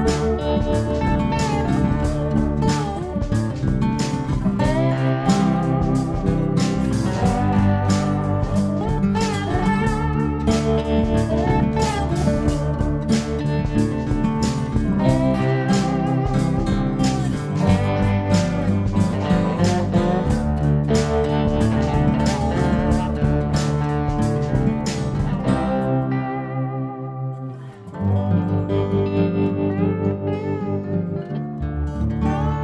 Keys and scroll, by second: 7.3 s, 9.5 ctrl+d, 17.1 +, 19.7 b, 22.3 BackSpace, 27.3 Page_Down, 32.1 Page_Down.